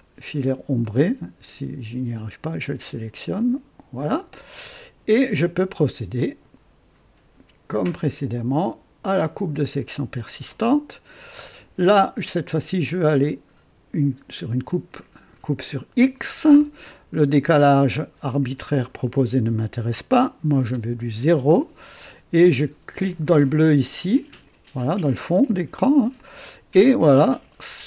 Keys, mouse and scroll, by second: 0.8 click, 2.3 click, 3.3 click, 4.3 click, 5.5 right click, 6.1 click, 7.8 click, 9.5 click, 14.6 click, 17.4 click, 20.7 KP_0, 24.2 click, 26.1-27.8 drag.